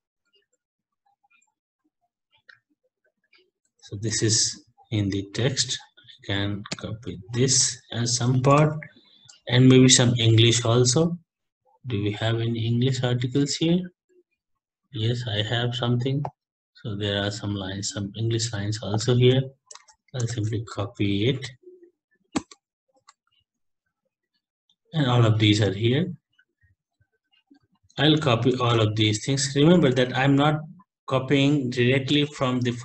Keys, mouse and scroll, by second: 0.0-1.5 scroll down 9, 1.5 Down, 1.7 Down, 1.9 Down, 2.5 Right, 2.7 Right, 2.9 Right, 3.1 Right, 3.2 Right, 4.1 ctrl+c, 5.6 click, 6.7 ctrl+n, 7.2 ctrl+v, 8.6 alt+Tab, 9.5-10.1 Down, 10.2-10.5 scroll down 20, 10.6 Down, 11.0 scroll down 5, 11.6-13.7 scroll down 32, 14.4 scroll down 1, 18.9 click, 19.8 ctrl+c, 20.4 alt+Tab, 22.4 Return, 22.9 Return, 23.6 ctrl+v, 25.1 Left, 25.5 ctrl+Home, 26.3 Down, 26.4-32.8 Down, 27.4 Up, 27.6 ctrl+a, 28.2 ctrl+c, 28.8 alt+Tab, 30.0 alt+Tab, 32.1 alt+Tab.